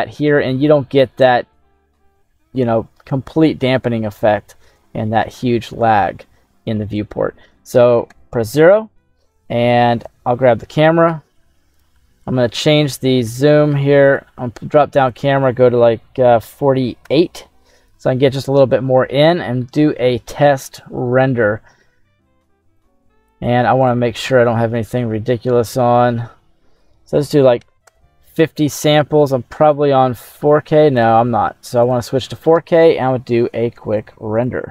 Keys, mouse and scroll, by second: 0.7 scroll down 1, 1.1-2.2 middle drag, 3.0-4.7 ctrl+middle drag, 4.9 shift+middle click, 6.0 ctrl+middle click, 8.0 KP_0, 10.1 right click, 11.7 click, 14.0 click, 15.1-17.3 drag, 22.8 click, 23.8 click, 25.6-28.0 drag, 28.7-29.4 scroll up 2, 29.6 click, 30.1-30.9 scroll up 2, 30.9-32.5 drag, 33.9 click.